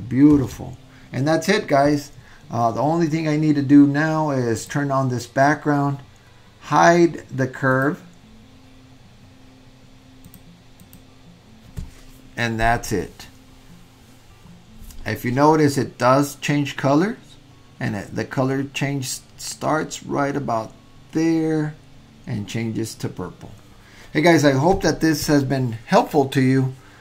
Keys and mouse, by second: 4.7-7.2 drag, 7.9 click, 10.3 drag, 11.0 click.